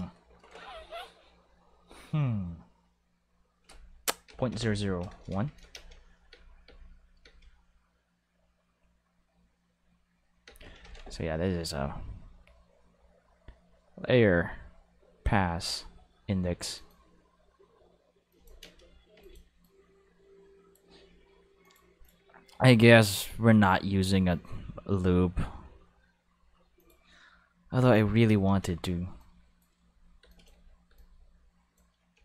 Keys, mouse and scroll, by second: 4.3-7.2 typing, 5.1 Return, 10.5 space, 10.8 ctrl+s, 16.8 click, 18.3 click, 18.6 space, 19.1 space, 19.2 click, 19.6 click, 21.6 click, 22.0 click, 26.8 click, 28.3 space, 28.7 space, 29.2 click, 29.9 space, 30.2 space, 30.3 click, 30.5 space, 30.9 space, 31.0-32.2 drag.